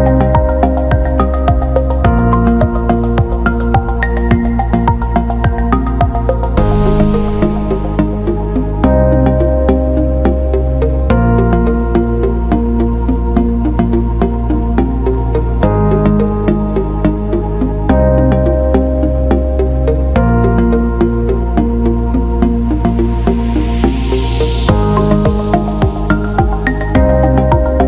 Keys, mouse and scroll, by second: 0.9 click, 1.8 click, 3.5 click, 6.5 click, 7.0 click, 8.2 alt+shift+middle click, 8.8 click, 24.0-24.3 drag.